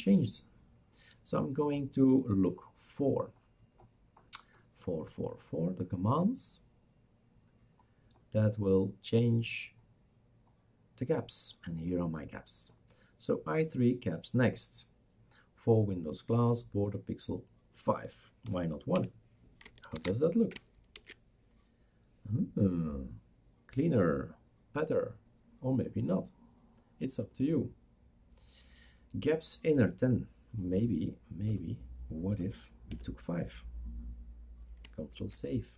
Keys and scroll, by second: 18.5 BackSpace, 18.9 1, 19.9 ctrl+s, 21.0 shift+super+r, 21.7 ctrl+s, 21.7 shift+super+r, 21.7 BackSpace, 31.5 BackSpace, 32.3-33.5 BackSpace, 32.9 5, 35.2 ctrl+s.